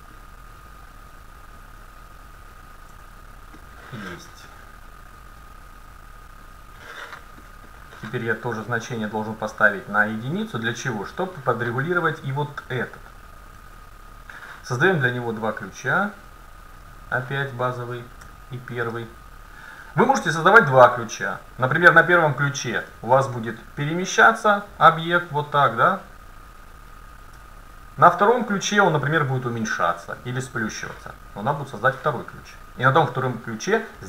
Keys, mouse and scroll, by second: 0.1-2.2 drag, 3.0 Tab, 7.5 middle click, 8.9-10.7 drag, 10.8-12.7 drag, 12.1-13.9 middle drag, 12.8-14.7 right drag, 15.7-18.6 drag, 18.3 Tab, 20.2 a, 21.7-23.4 drag, 23.4 middle click, 24.5-26.6 drag, 27.4 Tab, 32.9 Tab.